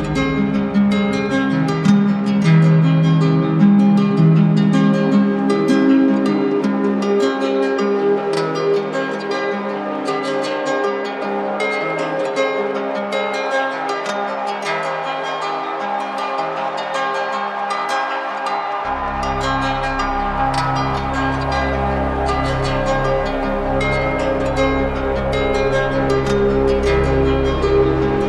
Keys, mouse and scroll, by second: 0.5 click, 1.7 click, 1.9 click, 2.1 click, 2.2 click, 2.4 click, 2.5 click, 3.0 click, 3.2 click, 3.6 click, 3.9 click, 7.6 click, 8.9-10.1 drag, 10.5-11.6 drag, 13.5-14.5 drag, 14.7-15.7 drag, 16.1-17.8 right drag, 20.4 click.